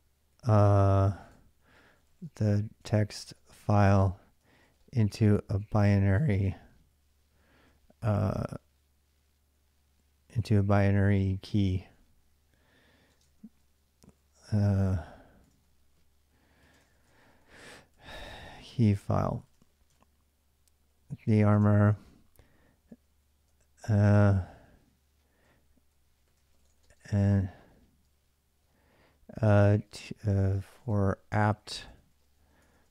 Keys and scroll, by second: 0.0-6.3 typing, 11.0-14.1 typing, 15.2-32.9 typing.